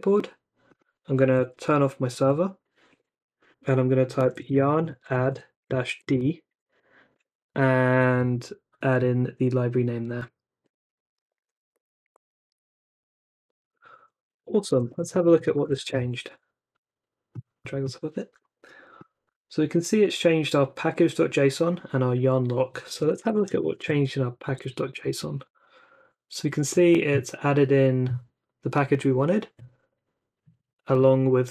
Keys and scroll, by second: 1.5 ctrl+c, 4.0-6.1 typing, 7.1 super+v, 10.6 Return, 14.3-16.2 typing, 20.0 super+c, 22.7-24.0 typing, 24.4 super+v, 24.9 Return.